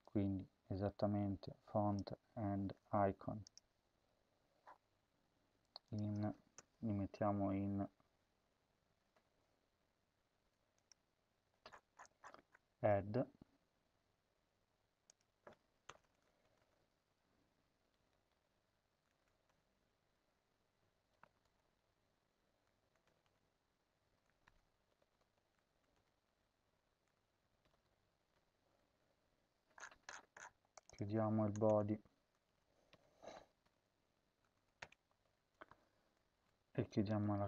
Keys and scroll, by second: 2.5 ctrl+c, 6.4 Return, 7.4 Tab, 9.1 ctrl+z, 9.6 ctrl+z, 15.8 Return, 15.9 Return, 16.3 Up, 16.5 Up, 16.7-22.0 typing, 19.4 Return, 22.9 Return, 23.1 Return, 24.0-25.7 typing, 25.8 Return, 27.2-28.7 typing, 31.6 Return, 32.1-34.1 typing, 34.7 Return, 36.0-37.4 typing.